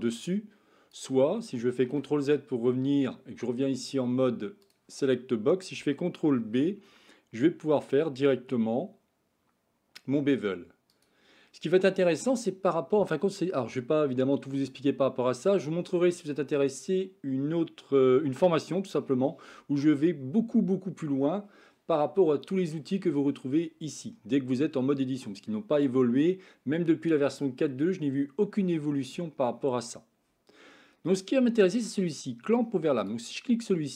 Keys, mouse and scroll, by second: 1.8 ctrl+z, 4.7 click, 6.4 ctrl+b, 32.9 click.